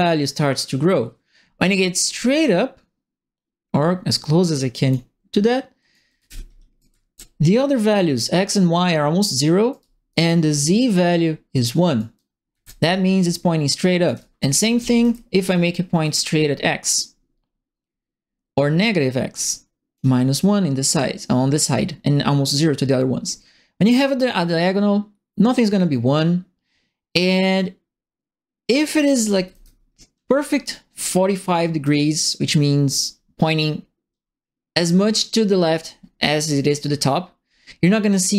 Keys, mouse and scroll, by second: 5.8-6.9 typing, 5.9 right click, 6.7 right click, 9.7 right click, 9.7 a, 11.9 right click, 12.1 s, 12.5 e, 13.8-14.7 typing, 14.0-15.1 right drag, 16.0-19.9 drag, 23.9-28.7 drag, 29.0-29.9 typing, 29.2-30.2 right drag, 30.2 click, 30.5-31.8 right drag.